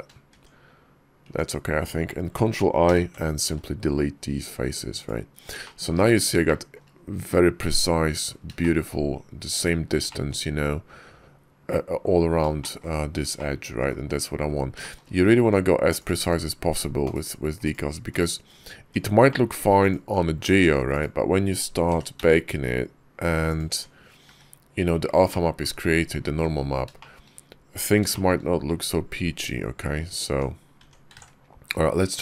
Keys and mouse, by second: 0.1 Tab, 1.1 Tab, 2.7 ctrl+i, 3.3 x, 5.5 shift+click, 6.3 shift+click, 8.4 shift+click, 9.9 shift+click, 12.4 shift+click, 12.6 shift+middle click, 13.2 middle click, 14.0 KP_5, 14.7 shift+middle click, 15.3 Tab, 15.8 middle click, 16.1 /, 16.9 /, 17.5 click, 18.0 /, 18.6 Tab, 19.1 click, 19.7 click, 20.3 Tab, 20.8 click, 21.7 e, 23.6 Tab, 24.1 `, 25.2-25.5 drag, 26.8 shift+click, 28.0 shift+drag, 30.1 Tab, 30.6 Tab, 31.1 ctrl+`.